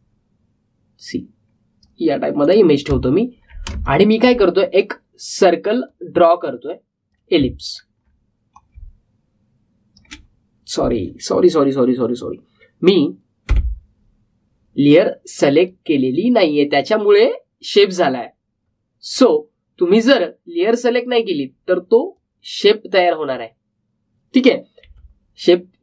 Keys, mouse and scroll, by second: 4.0-4.5 alt+scroll up 1, 4.8-8.7 drag, 8.7 alt+scroll down 1, 9.5-13.6 drag, 16.5 click, 20.1 click, 23.1-25.8 drag.